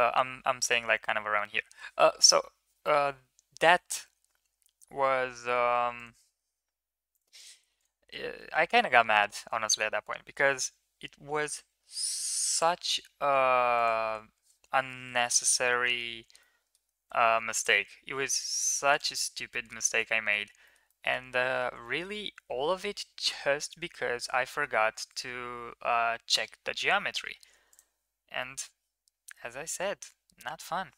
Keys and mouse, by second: 7.2 ctrl+click, 8.8 middle click, 9.5 shift+middle click, 11.2 e, 14.8 middle click, 15.6 shift+middle click, 16.3 middle click, 17.2 ctrl+z, 18.3 ctrl+z, 18.7 click, 19.3 middle drag, 19.8-20.2 middle drag, 20.5 shift+middle click, 20.7 middle drag, 21.6 shift+middle drag, 24.3 middle click, 28.2-29.1 middle drag.